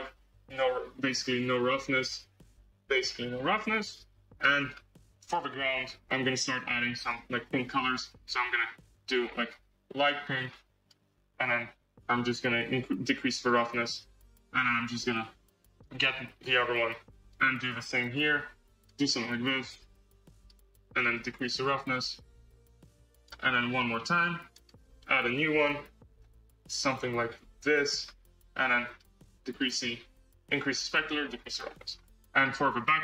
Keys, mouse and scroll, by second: 4.6 scroll, 5.2 click, 6.0 click, 6.3 click, 7.0-8.4 drag, 13.0-15.7 drag, 16.6-17.8 drag, 20.2-23.7 drag, 24.6-26.3 drag, 29.4 click, 30.3-31.8 drag, 31.8 scroll.